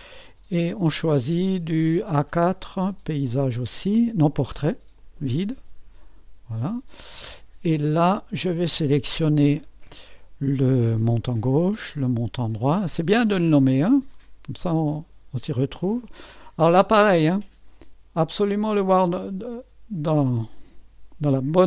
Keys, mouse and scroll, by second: 0.0-1.8 scroll down 1, 5.0-6.7 drag, 8.3 click, 11.1 click, 12.6 click, 15.0 ctrl+click, 18.5-19.7 drag.